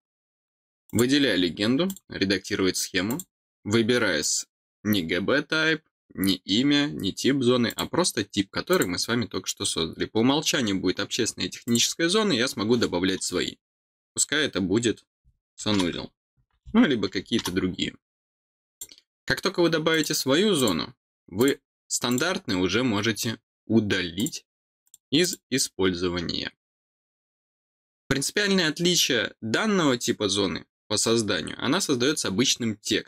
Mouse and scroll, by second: 0.8 click, 1.8 click, 3.0 click, 7.6 click, 8.7 click, 11.6 click, 18.6 click, 19.9 click, 20.5 click, 21.3 click, 22.0 click, 24.1 click, 24.8 click, 25.2 click.